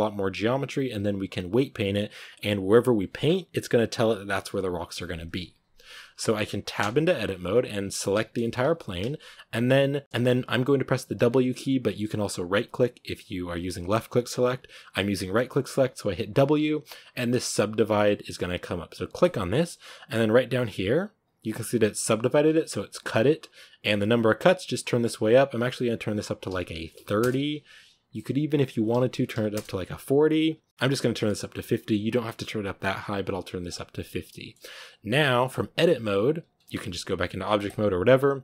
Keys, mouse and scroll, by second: 6.7 Tab, 7.6-8.0 scroll down 4, 8.0 a, 8.3 shift+middle click, 8.4-9.3 scroll up 2, 9.3 a, 9.5-10.0 scroll up 1, 24.3-33.9 drag, 33.9-34.5 middle drag, 34.5 scroll up 1, 36.6 Tab.